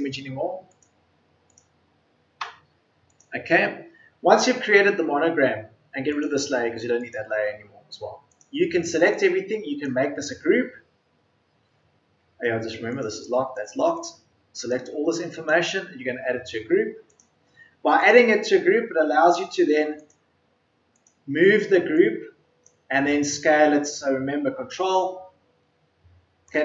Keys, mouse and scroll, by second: 2.4 Delete.